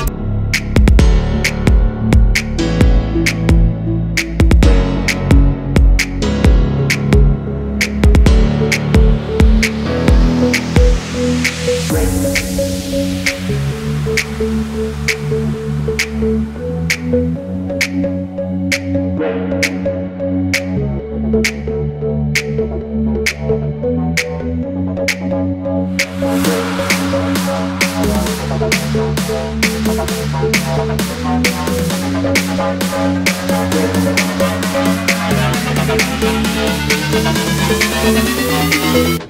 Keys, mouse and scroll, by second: 0.1-0.5 alt+scroll down 1, 0.6 ctrl+shift+], 1.1-1.4 alt+scroll down 1, 1.5 alt+scroll up 1, 2.3-2.7 alt+scroll down 1, 2.7 double click, 3.4 ctrl+shift+], 3.6 shift+click, 3.9 alt+scroll down 1, 4.4 space, 5.3 alt+scroll down 1, 6.0 alt+scroll up 1, 6.5 alt+scroll down 1, 6.8 space, 9.5 alt+scroll up 1, 10.2 double click, 10.8 alt+scroll up 1, 11.2 typing, 11.7 double click, 12.3-12.7 alt+scroll down 1, 12.7 alt+scroll up 1, 15.4 ctrl+8, 15.9 double click, 16.8 alt+scroll up 1, 21.1-21.5 alt+scroll up 1, 21.8-22.1 alt+scroll up 1, 22.6 alt+scroll down 1, 26.0 BackSpace, 26.6 3, 27.3 double click, 30.2 alt+scroll up 1, 30.7 alt+scroll down 1, 31.3 space, 31.5-32.0 alt+scroll down 2, 32.4 alt+scroll up 1, 33.7 ctrl+g, 34.2-34.5 alt+scroll down 1, 34.5 alt+scroll up 1, 35.3 shift+click, 36.0 space, 36.0 double click, 36.6 scroll up 1, 37.2 shift+click, 38.2 alt+scroll down 1, 38.4 space.